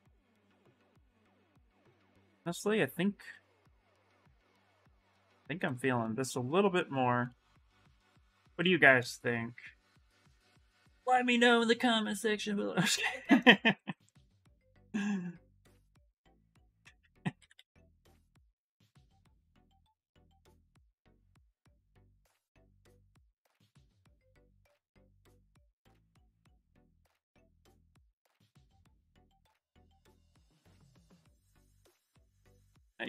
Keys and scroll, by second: 3.2 ctrl+z, 9.1 s, 10.7 s, 13.5 ctrl+z, 14.2 s, 17.1 ctrl+z, 17.3 ctrl+z, 17.6 ctrl+z, 17.7 ctrl+z, 17.9 ctrl+z, 18.2 ctrl+z, 19.4 s, 21.1 s, 24.1 ctrl+z, 24.1 ctrl+x, 25.0 ctrl+z, 25.0 ctrl+x, 25.3 ctrl+x, 25.5 ctrl+x, 25.6 ctrl+x, 26.1 ctrl+z, 26.3 ctrl+z, 26.4 ctrl+z, 26.9 ctrl+shift+z, 27.4 ctrl+z, 27.6 ctrl+z, 27.7 ctrl+z, 27.9 ctrl+z, 28.7 ctrl+z, 29.1 ctrl+z, 32.4 w.